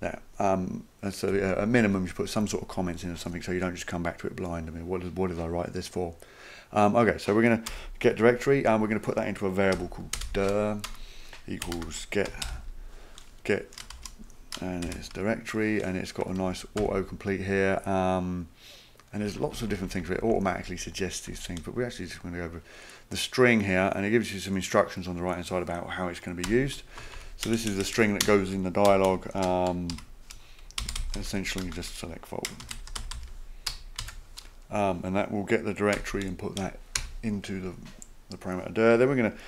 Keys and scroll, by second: 7.7 Return, 9.5-13.0 typing, 14.6-15.3 typing, 16.2 Down, 16.4 Down, 16.8 Down, 19.2 Down, 19.4 Down, 19.6 Down, 19.7 Down, 19.8 Down, 20.0 Down, 20.2 Down, 20.3 Down, 20.5 Down, 20.6 Down, 21.2 Up, 26.5 Return, 27.0 Left, 27.1 Left, 27.4-34.0 typing, 35.9 End, 37.0 Return.